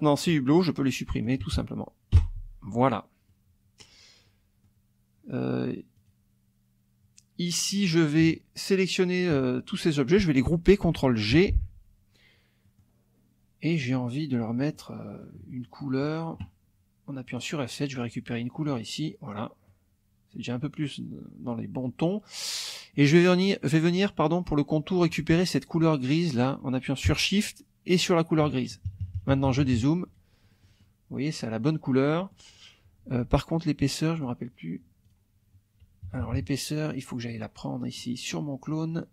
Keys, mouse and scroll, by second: 0.1 shift+click, 0.5 shift+click, 1.2 shift+click, 2.2 Delete, 3.2 middle click, 3.2-4.0 scroll up 1, 4.2 middle click, 4.2-4.8 scroll up 1, 6.0 click, 8.2 shift+click, 9.0 shift+click, 11.3 ctrl+g, 12.6 click, 14.8 click, 15.1 middle click, 15.5 middle click, 15.6 click, 15.8 middle click, 17.3 click, 18.7 click, 19.7 middle click, 22.9 middle click, 23.2-24.4 drag, 24.4 middle click, 24.5 click, 28.0 shift+click, 28.9 shift+KP_Subtract, 30.5 click, 32.2 click, 33.0 F2, 33.5 click, 34.1 click, 35.0 click, 36.1 KP_Subtract, 36.9-37.5 scroll up 1, 37.9-38.5 scroll up 1.